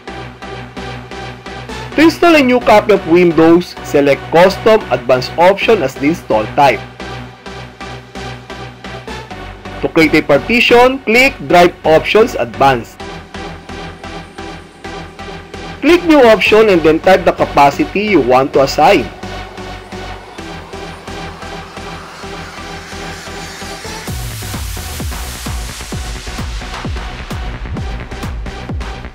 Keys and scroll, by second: 0.0 alt+n, 7.8 alt+c, 13.9 alt+a, 20.2 alt+v.